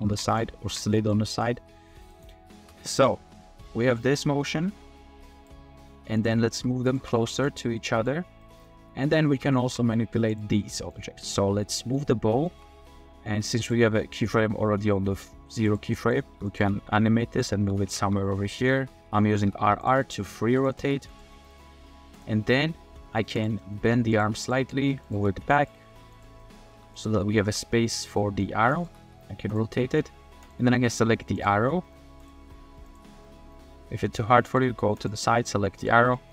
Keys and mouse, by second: 0.0 r, 0.0 z, 0.9 shift+middle click, 1.3 middle click, 2.1 middle click, 2.6 space, 3.1 space, 4.0-5.5 drag, 6.2 click, 6.5 r, 7.0 r, 7.1 r, 7.6-8.0 middle drag, 8.4 middle drag, 9.5 shift+middle drag, 10.7 middle drag, 11.8 middle click, 12.4 shift+click, 15.7 click, 16.0 click, 16.3-21.0 typing, 19.2 click, 19.8-20.3 drag, 20.6 click, 21.4 click, 22.2 click, 23.3 click, 23.6 drag, 23.8-26.7 typing, 26.4 click, 27.7 click, 28.1 drag, 28.3 middle click, 28.5 g, 28.7 click, 28.8 r, 29.0 r, 29.7 middle drag, 30.7 click, 30.9 middle click, 31.4 click, 31.8 click, 32.2 click, 32.9 click, 33.2 drag, 34.2 drag, 34.3-34.6 middle drag, 35.0 middle click, 35.4-35.9 middle drag, 36.1 middle click.